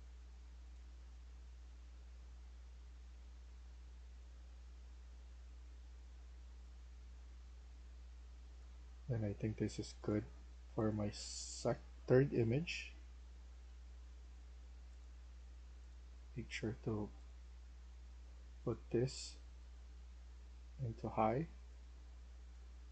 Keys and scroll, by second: 1.2 d, 2.9 a, 22.3-22.9 typing.